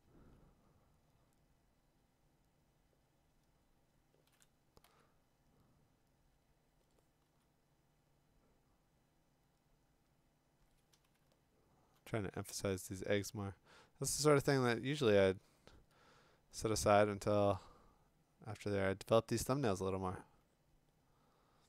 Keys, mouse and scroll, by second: 4.8 x, 7.3 x, 11.8 [.